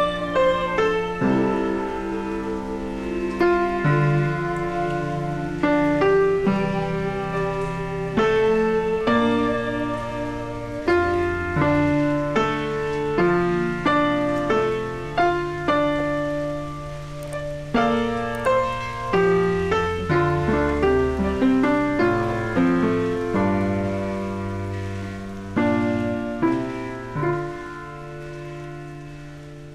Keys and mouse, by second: 9.1 click, 11.5 0, 12.5 Return, 13.8 click, 17.9 1, 18.5 click, 20.2 click, 21.6 click, 23.1 click, 23.6 y.